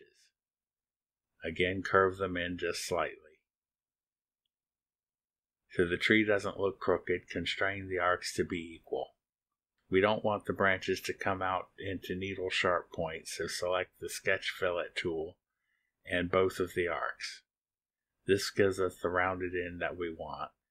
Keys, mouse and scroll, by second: 0.0 click, 1.4 click, 3.5 click, 4.8 click, 5.0 click, 6.6 click, 8.3 ctrl+click, 11.0 click, 15.2 click, 17.2 click, 18.3 click, 19.8 click.